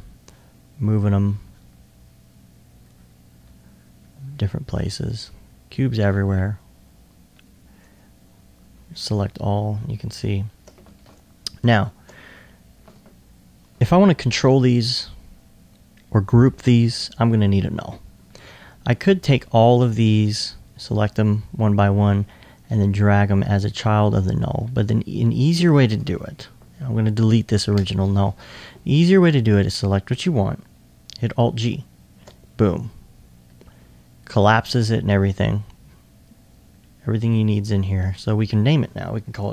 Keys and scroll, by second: 9.9 s, 11.0 alt+1, 11.9 alt+1, 39.3-39.5 typing.